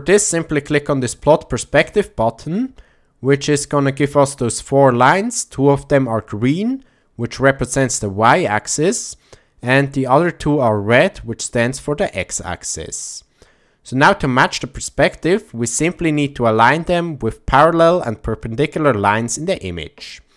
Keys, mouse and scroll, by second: 1.8 click, 3.7 click, 14.5 click, 15.4 shift+middle click.